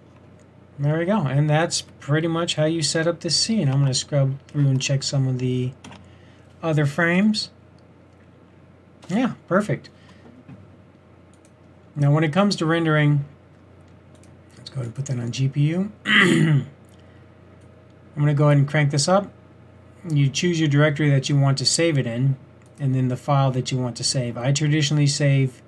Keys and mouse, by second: 5.2 typing, 7.4-7.8 typing, 11.4-13.0 middle drag, 13.0-13.7 drag, 13.7 typing, 18.2 typing, 20.1-21.7 middle drag, 22.7-25.6 drag.